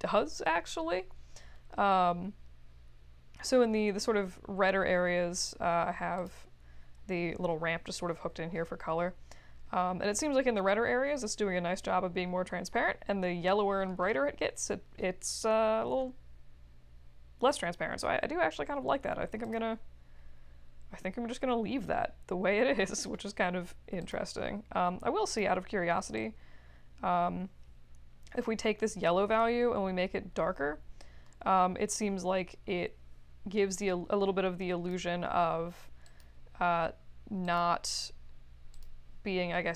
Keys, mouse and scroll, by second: 4.1 middle click, 6.1 click, 19.4 click, 24.0 click, 25.2 click, 26.1-34.9 drag, 36.0 click, 37.4 click, 38.7 click.